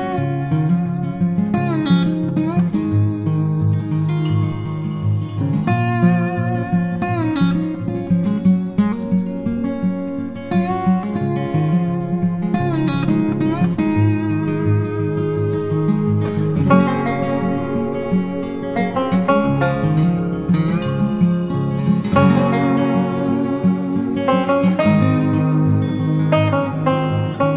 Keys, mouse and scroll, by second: 5.3 double click.